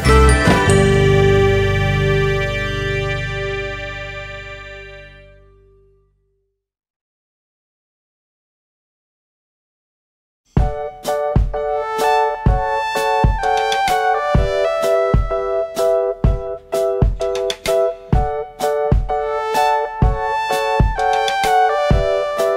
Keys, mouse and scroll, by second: 0.1 `, 1.2 ctrl+i, 1.7 click, 2.5 `, 3.8 click, 5.3-7.6 drag, 5.3 scroll down 1, 5.5 `, 5.9 scroll up 1, 6.0 `, 6.6 scroll up 1, 6.7 `, 8.2 scroll down 1, 8.5 a, 8.8-9.4 scroll down 1, 10.1 scroll up 1, 10.2 `, 10.7 Tab, 11.3 alt+click, 12.3 2, 12.5 `, 13.1 KP_Enter, 13.2 KP_Decimal, 13.5 alt+a, 13.9 `, 14.4 Tab, 16.7-17.1 scroll down 2, 18.3 Tab, 18.8 3, 18.9 alt+click, 21.9 click.